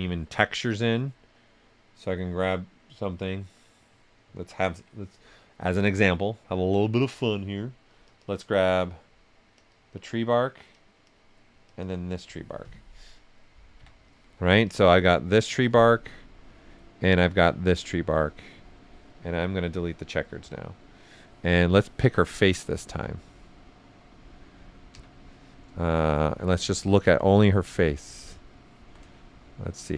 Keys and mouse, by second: 7.9 click, 13.7 ,, 14.6-21.6 drag, 22.1 right click, 24.9 z, 25.2 right click, 27.0 click, 28.2 right click, 29.3 shift+g.